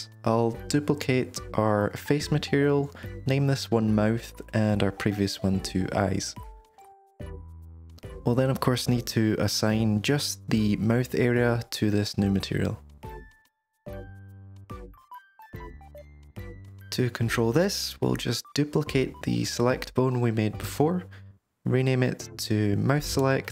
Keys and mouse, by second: 0.2-2.9 drag, 4.1 click, 5.0-7.0 right drag, 9.4 click, 9.8 Tab, 10.2 3, 10.6 click, 11.0 shift+click, 11.3 shift+click, 11.5 shift+click, 13.5 click, 16.1 Tab, 17.9 drag, 18.1 Tab, 19.3 shift+d, 21.8 F2.